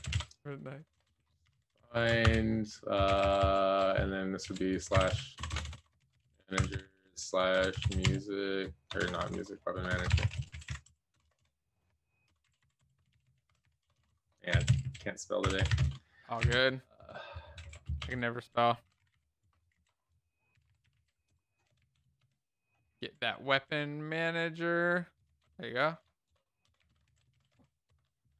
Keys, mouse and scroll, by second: 0.0-2.2 typing, 3.3 Left, 3.3 shift+', 4.8-16.1 typing, 16.6 Escape, 16.7 Right, 16.9 Right, 17.7-21.4 typing, 21.9 ctrl+space, 23.3-26.8 typing, 27.3 alt+shift+f, 27.7 ctrl+s, 27.8 Return.